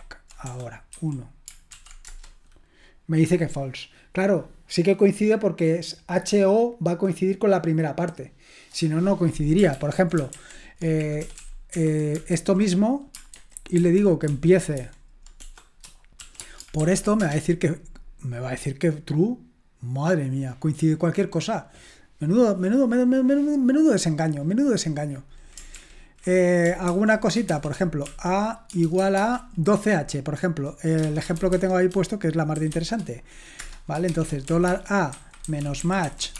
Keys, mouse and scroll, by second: 0.5 BackSpace, 0.9 1, 1.7 [, 2.1 Return, 9.8 ctrl+p, 10.3 alt+b, 11.2-13.1 typing, 13.4 alt+b, 13.8 alt+f, 14.3 alt+f, 14.8 alt+b, 15.4 BackSpace, 16.4 ^, 16.8 [, 17.2 Return, 25.8 ctrl+p, 26.9 ctrl+c, 27.5-29.5 typing, 31.1-36.3 typing, 33.6 Return.